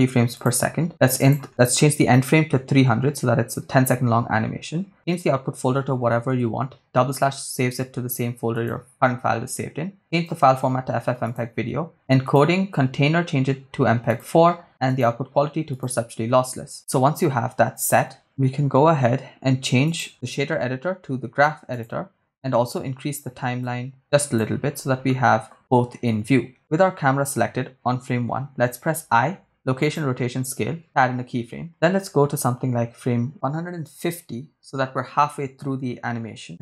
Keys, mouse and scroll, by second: 1.2-3.4 drag, 2.6 0, 4.4-4.9 scroll down 2, 4.9-6.6 drag, 5.9 /, 7.3 scroll down 1, 7.8 scroll down 1, 8.5-10.2 drag, 10.5-11.2 scroll down 4, 11.2 click, 11.6-12.2 scroll down 1, 12.2 scroll down 1, 12.3-14.3 drag, 14.9-16.0 drag, 19.9-21.9 drag, 23.6 click, 24.7-25.0 scroll down 2, 25.1 middle click, 28.9 i, 34.1 click.